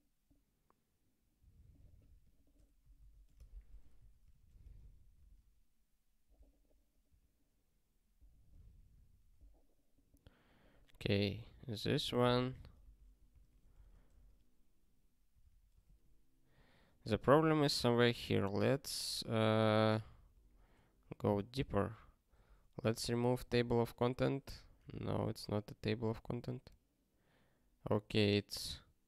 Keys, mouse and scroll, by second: 4.6 super+o, 5.4 ctrl+k, 7.0 q, 13.7 super+o, 15.1 ctrl+k, 22.9 super+o, 23.6 ctrl+k, 24.8 q.